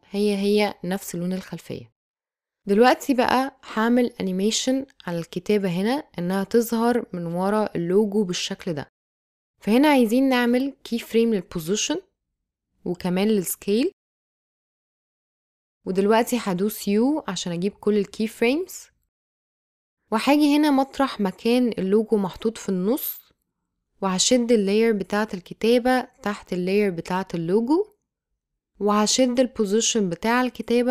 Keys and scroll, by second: 11.6 p, 14.2 s, 17.0 u.